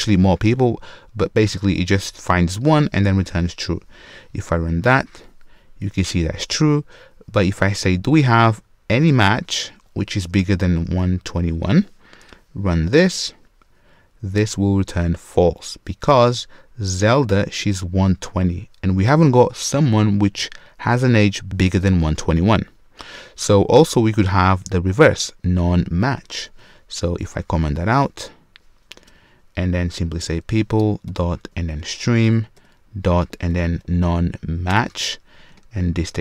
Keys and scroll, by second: 2.6 Return, 12.9 shift+F10, 26.4 super+/, 30.9 Return, 35.5 ctrl+space.